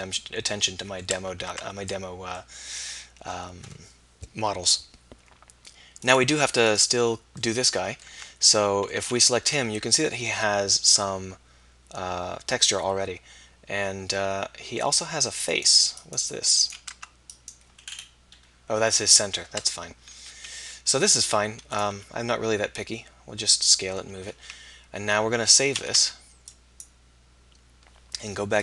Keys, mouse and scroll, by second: 1.5 Tab, 2.5-4.3 middle drag, 6.1-8.1 middle drag, 8.2 Tab, 9.0 a, 16.9 Tab, 19.5 Tab, 20.9 s, 21.9 g, 25.8 ctrl+s.